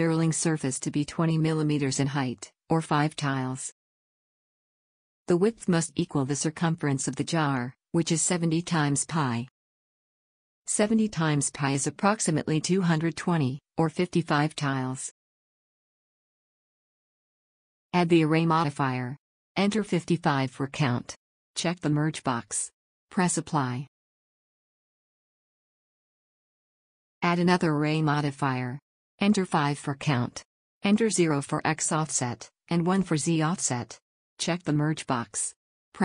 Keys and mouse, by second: 17.7-24.8 drag, 21.7 5, 33.7 Tab.